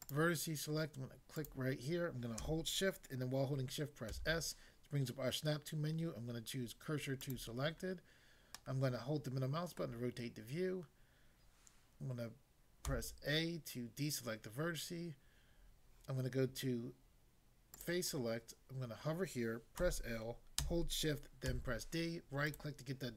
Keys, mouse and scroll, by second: 0.0 click, 1.4 click, 4.1 s, 7.3 click, 8.6 middle click, 9.8 middle click, 12.8 a, 17.8 click, 19.8 l, 21.4 d, 22.6 right click.